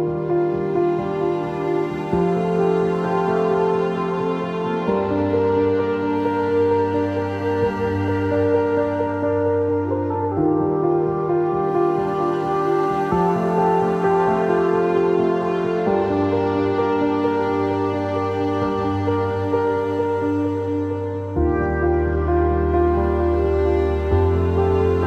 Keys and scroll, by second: 22.4 q, 24.8 ctrl+z.